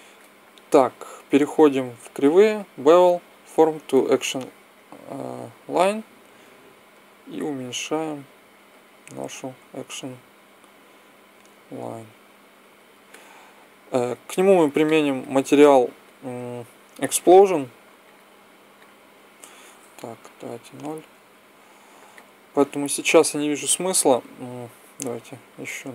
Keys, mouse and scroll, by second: 2.3-3.3 drag, 6.2 s, 9.4 s, 18.3-20.0 middle drag, 20.0 KP_0, 22.0-23.6 scroll up 1, 25.5-25.9 middle drag.